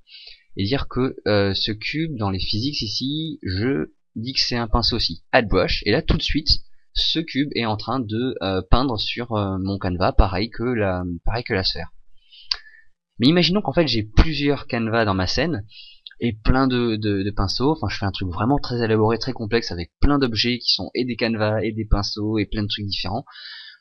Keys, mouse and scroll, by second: 6.3 click, 9.6 click, 13.2 click.